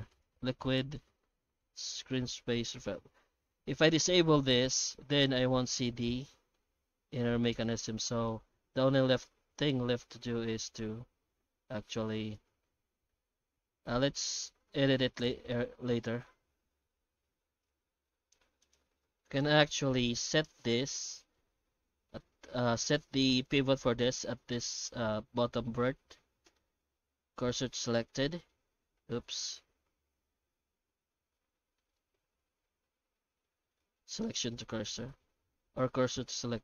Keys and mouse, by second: 0.1 click, 5.4-6.5 middle drag, 7.5 middle click, 8.3 Tab, 8.8 alt+shift+z, 9.7 Tab, 10.3 Tab, 11.3 Tab, 11.9 Tab, 12.3 alt+shift+z, 12.7 alt+shift+z, 13.1 Tab, 13.8 alt+a, 14.1 Tab, 15.2-16.3 middle drag, 16.5 Tab, 17.6 alt+shift+z, 17.9 alt+shift+z, 18.6 right click, 20.2 middle click, 20.8 Tab, 21.9 1, 22.2 alt+middle click, 23.4 right click, 23.8 shift+middle click, 25.4-26.5 middle drag, 26.8 shift+s, 27.9 alt+middle click, 29.9 shift+h, 30.2 Tab, 31.8 middle click, 32.3 ctrl+z, 32.5 ctrl+z, 32.8 ctrl+z, 33.2 ctrl+z, 33.5 ctrl+z, 33.8 ctrl+z, 34.3 ctrl+z, 34.7 ctrl+z, 35.0 ctrl+z, 35.3 ctrl+z, 35.8 ctrl+z, 36.1 ctrl+z.